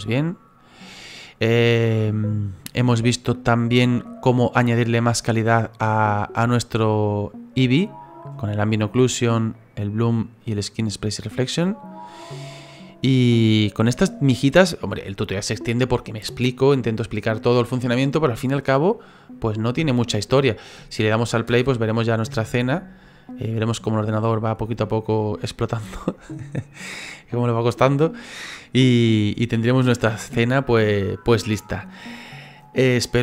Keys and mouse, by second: 0.1 shift+middle click, 0.9 middle click, 2.1 shift+middle click, 2.6 middle click, 4.4 click, 21.5 space.